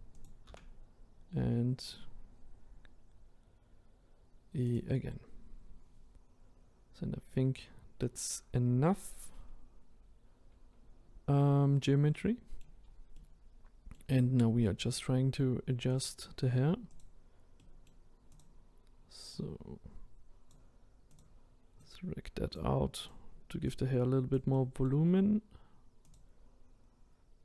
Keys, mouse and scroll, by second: 0.5 e, 5.8-6.5 scroll down 1, 6.5-7.0 scroll up 2, 12.1 middle click, 12.8-13.2 scroll down 4, 13.2 middle click, 14.1-14.7 scroll up 1, 14.7-15.9 middle drag, 15.9 click, 17.0 click, 17.6 middle click, 18.4 click, 19.4 click, 21.8 click, 23.1 click, 24.5-25.5 middle drag, 25.5-26.1 scroll up 1, 26.1 click.